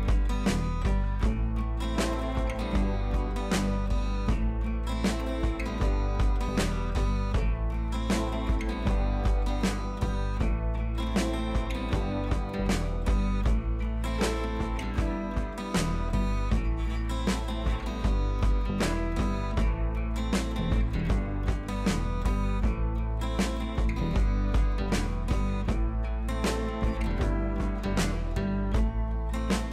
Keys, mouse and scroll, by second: 0.1 click, 1.3 ctrl+scroll down 1, 1.6 ctrl+v, 1.8-2.9 ctrl+scroll up 2, 2.9 scroll up 1, 3.9 click, 6.0 ctrl+d, 6.6-7.8 right drag, 7.8-9.0 drag, 9.2 ctrl+a, 9.5 ctrl+c, 10.2 right click, 10.5 click, 13.4 ctrl+v, 13.8 scroll up 1, 14.2 ctrl+t, 14.4 scroll down 1, 14.9-21.0 drag, 21.0 ctrl+t, 22.2-24.2 alt+drag, 24.2 Up, 24.5-28.3 drag.